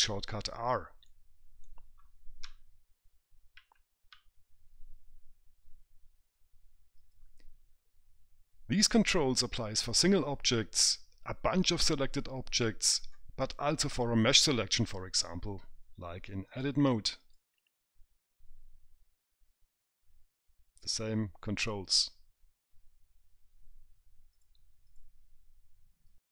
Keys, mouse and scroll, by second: 1.5 right click, 2.9 w, 4.0 e, 4.6 r, 16.9 click, 24.7 click.